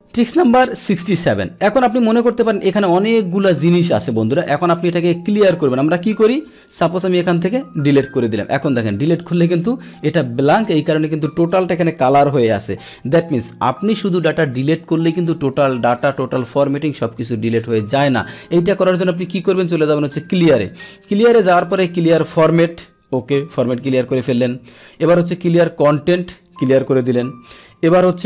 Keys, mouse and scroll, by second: 1.8 click, 3.2 click, 4.4 click, 5.6-6.6 drag, 7.7 Delete, 8.5 Delete, 8.5 click, 9.0 click, 10.2-11.3 drag, 13.0 ctrl+z, 20.3 click, 22.3 click, 24.1 click, 24.7 click, 25.8 click, 27.5 ctrl+z.